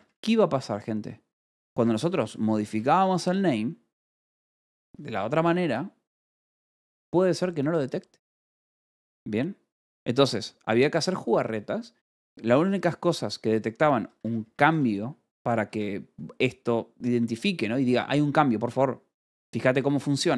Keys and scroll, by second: 0.4 k, 1.9 j, 2.2 Escape, 3.1 shift+v, 3.1 Escape, 15.1 shift+v, 15.6 Escape.